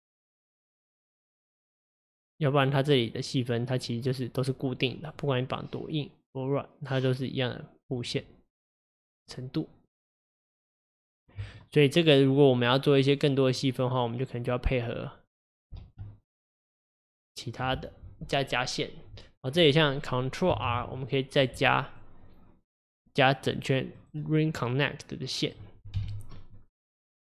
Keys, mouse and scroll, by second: 5.2-8.2 drag, 13.6 click, 15.8 alt+z, 16.3 click, 20.7 ctrl+r, 24.5-26.0 middle drag, 26.0 KP_1.